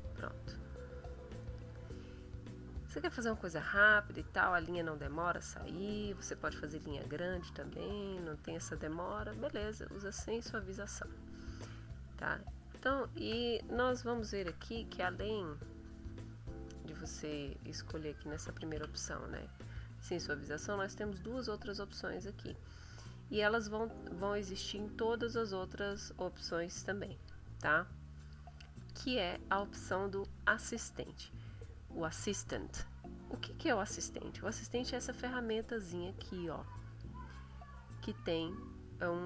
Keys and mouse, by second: 0.5 click, 1.4 click, 4.5 click, 5.1 click, 5.5 click, 6.1 click, 7.7 ctrl+z, 14.1 shift+click, 14.5 shift+e, 14.8-17.8 shift+drag, 18.7 e, 25.3 click, 25.7 click, 26.5 click, 27.1 click, 28.1 click, 28.7 click, 29.4 click, 30.1 click, 36.8 click.